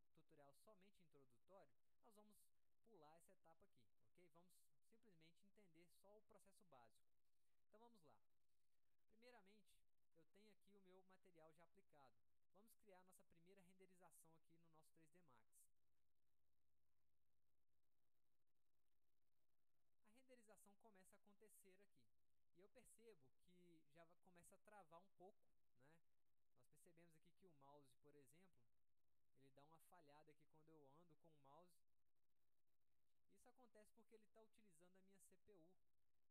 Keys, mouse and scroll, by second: 3.7 click, 7.8-8.1 drag, 12.6 middle click, 15.2 click.